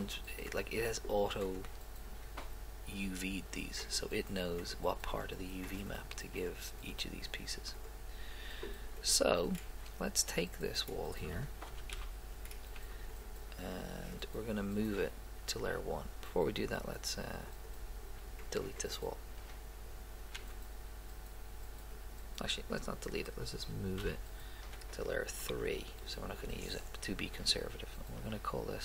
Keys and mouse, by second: 3.9-5.0 right drag, 5.4 right click, 9.4 right click, 11.8 z, 12.0 a, 12.9 b, 17.5 click, 20.5 x, 24.0 m, 27.4 click.